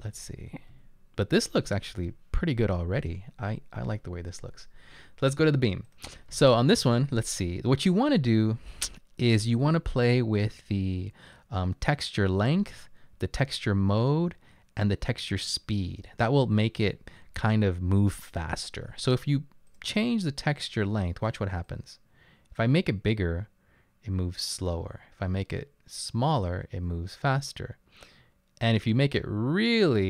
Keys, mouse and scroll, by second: 0.0-1.2 typing, 3.9-4.6 typing.